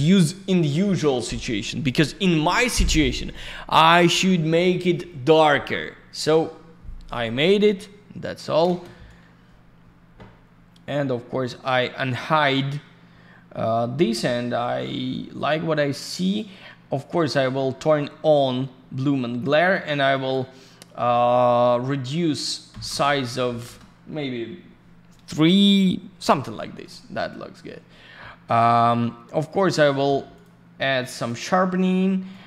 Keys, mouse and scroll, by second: 8.4 middle click, 8.5 middle click, 8.6 ctrl+shift+space, 10.4 scroll up 1, 11.3 scroll down 1, 12.1 scroll up 1, 16.2 click, 16.9 click, 20.1 click, 22.8 Return, 23.4 3, 23.6 Return, 27.0 scroll down 1, 30.3 click, 31.1 click, 32.3 click.